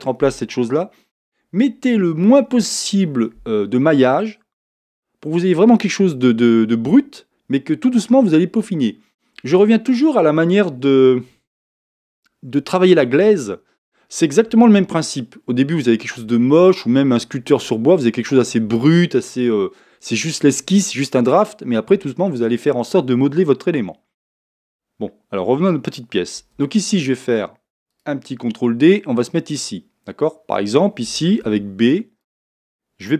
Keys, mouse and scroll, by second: 26.4 ctrl+r, 31.1 a.